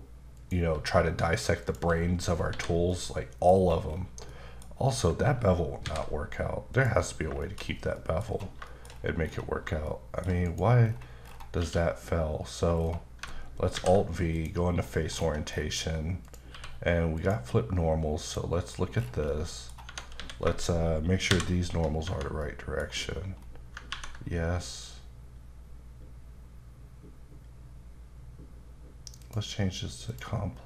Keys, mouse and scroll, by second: 0.4 click, 0.7 g, 1.6 click, 2.0-2.5 scroll down 4, 2.5 h, 2.9 middle click, 3.5-4.3 scroll up 7, 4.3 middle click, 5.9 alt+v, 6.7 click, 7.2 scroll down 1, 7.4 shift+middle click, 7.6-8.4 scroll up 5, 8.0 middle click, 8.7 shift+middle click, 8.9-9.6 scroll up 5, 9.9 shift+middle click, 10.5 click, 10.9-11.6 scroll down 4, 11.6 q, 12.8-13.2 scroll down 2, 13.8 alt+v, 14.4 click, 14.8-15.5 scroll up 6, 16.2 click, 16.5 q, 17.2 click, 17.8-18.3 scroll down 1, 18.3 click, 18.6-19.3 scroll down 6, 19.3 middle click, 19.9 Tab, 20.2 a, 21.3 shift+n, 22.1 Tab, 22.4 middle click, 23.1-23.7 scroll up 3, 29.2 click.